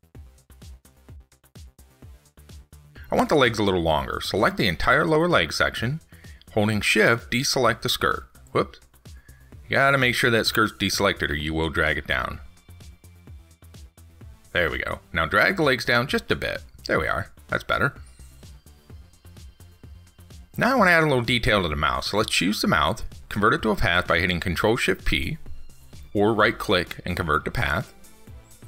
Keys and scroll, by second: 10.2 ctrl+z, 13.4 ctrl+z, 19.9 ctrl+s.